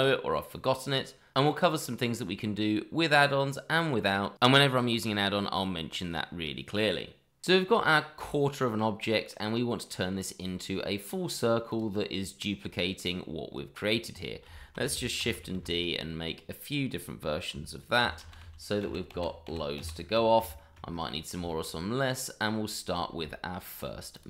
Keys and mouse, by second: 0.6 3, 1.0 click, 1.2 shift+click, 1.7 2, 2.0 click, 2.2 shift+click, 3.0 middle click, 3.4 click, 3.7 shift+click, 4.5 click, 5.6 Tab, 6.0 middle drag, 6.5 middle click, 6.7 shift+middle drag, 6.9 middle drag, 7.5-9.3 middle drag, 11.7 click, 14.5 shift+middle click, 15.2 shift+d, 15.5 x, 16.6 click, 18.0 shift+r, 20.5 shift+middle drag, 21.4 shift+middle drag, 22.0-22.4 middle drag, 23.2 shift+middle click, 24.1 click.